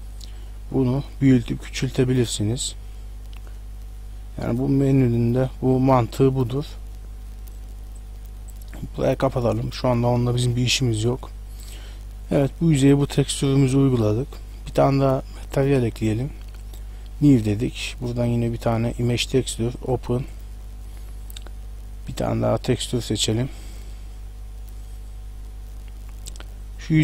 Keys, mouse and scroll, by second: 8.0 click, 10.3 middle click, 13.3 shift+middle click, 15.4 click, 16.7 click, 17.8 click, 19.8 click, 20.2 click, 25.1 click, 25.1-25.6 scroll down 5, 26.6 right click.